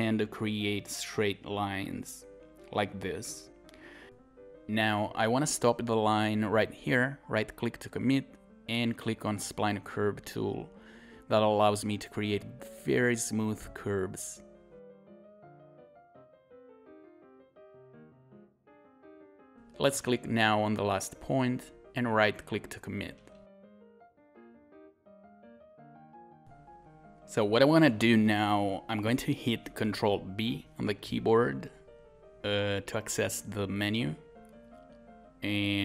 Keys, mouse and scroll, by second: 0.2 scroll up 1, 4.0 scroll down 1, 4.1 scroll up 1, 4.3 click, 4.5 scroll down 1, 4.6-5.0 scroll up 1, 5.0 click, 6.3 scroll down 1, 7.4 right click, 7.8 scroll up 1, 9.4 click, 13.0 scroll down 1, 13.3 scroll up 1, 18.5 scroll down 1, 18.6 scroll up 1, 18.7-20.7 scroll down 1, 31.4-34.5 scroll up 1, 34.5 ctrl+b.